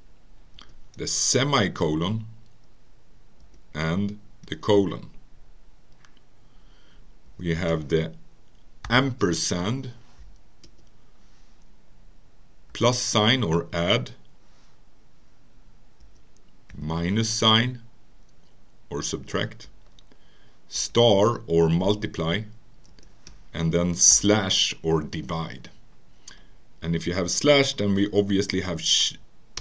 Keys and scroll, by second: 0.6 Return, 1.5 ;, 3.4 Return, 4.5 typing, 5.9 typing, 7.3 Return, 8.9 &, 10.7 Return, 14.2 typing, 16.0 Return, 16.7 -, 19.1 Return, 20.8 *, 22.9 Return, 24.1 /, 27.4 Return.